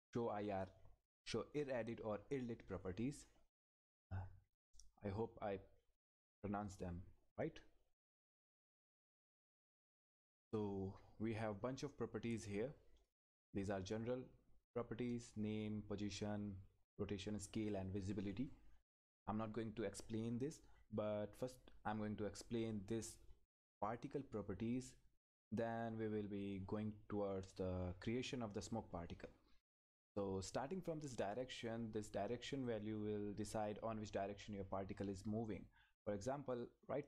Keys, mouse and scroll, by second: 2.7 click, 5.1 click, 10.3-20.9 drag, 20.9-21.5 scroll down 1, 21.5-22.6 scroll up 1, 22.6-23.3 scroll down 1, 25.3-26.7 scroll up 1, 31.1 scroll up 1, 31.6 click, 36.5 click.